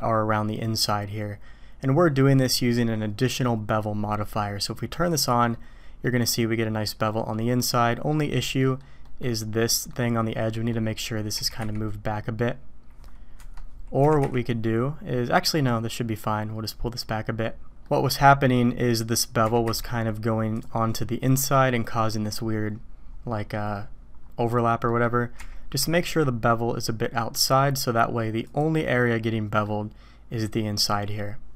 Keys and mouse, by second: 5.1 middle click, 6.0-6.9 drag, 7.3-7.9 drag, 8.6 drag, 9.0 click, 9.6 drag, 10.5 click, 11.3 g, 14.0 g, 17.5 middle click, 17.8 middle drag, 19.4 g, 21.7-22.4 drag, 23.4 middle click, 24.9 middle click, 25.4 g, 29.2-29.6 middle drag.